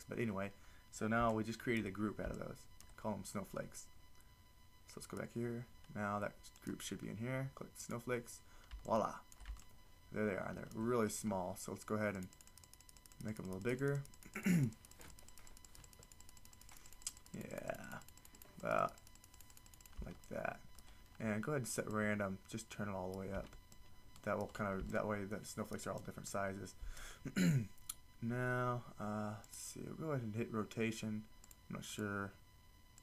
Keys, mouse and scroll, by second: 20.3 middle click, 20.7 middle click, 29.5 click.